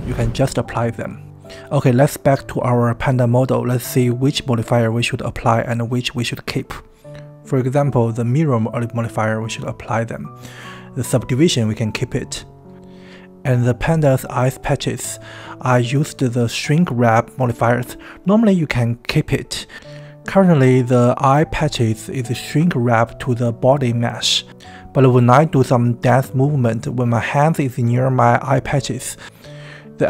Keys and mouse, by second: 8.3-9.6 drag, 10.9 Tab, 12.4 Tab, 12.9-15.0 middle drag, 15.6 KP_1, 24.4 ctrl+z, 24.8 click, 25.4 middle click, 25.9 Tab, 27.0-30.0 middle drag.